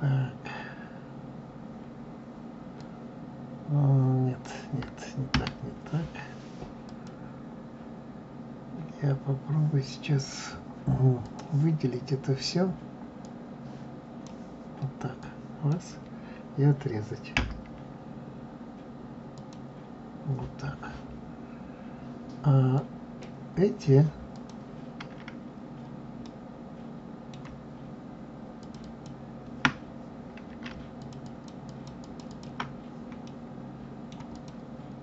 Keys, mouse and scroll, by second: 2.7 click, 5.3 Escape, 6.8 click, 11.2 click, 13.2-15.2 drag, 17.3 Delete, 22.6 click, 24.3 click, 26.2-28.6 middle drag, 28.6 shift+click, 28.8 shift+click, 30.9 shift+click, 31.2 shift+click, 31.6 shift+click, 32.0 shift+click, 32.2 shift+click, 33.2-34.3 middle drag, 34.3 click.